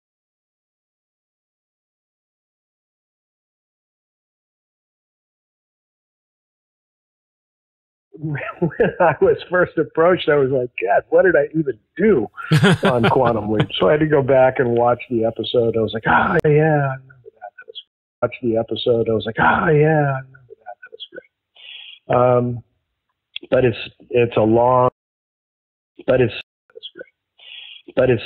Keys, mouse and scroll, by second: 8.0 space, 10.6-12.5 drag, 13.0 click, 14.6-15.8 drag, 16.3 Delete, 17.2 click, 17.7 space, 18.0 click, 18.1 space, 23.2-24.9 drag, 24.8 space, 25.6 ctrl+shift+Delete, 25.9 space, 26.3 space, 26.5 click, 26.6 space.